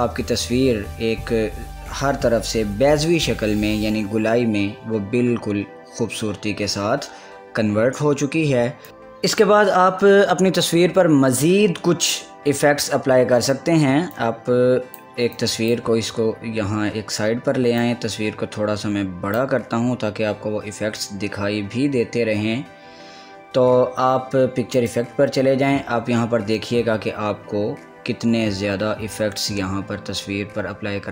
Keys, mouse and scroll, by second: 8.9 click, 14.3-21.8 drag, 24.9 click.